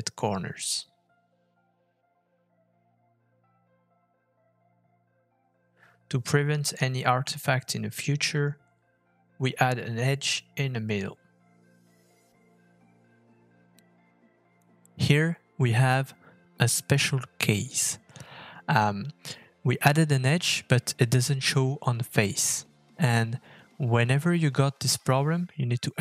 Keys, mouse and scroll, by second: 3.8 middle click, 4.0 scroll up 3, 4.4 shift+middle click, 7.8-8.3 scroll down 3, 8.3 shift+middle click, 9.3 Tab, 11.5 ctrl+r, 14.1 Tab, 14.4 middle click, 14.6-15.0 scroll up 2, 15.0-15.5 scroll down 2, 15.8 f, 16.6 middle click, 18.7 middle click, 20.3 middle click, 21.7 middle click.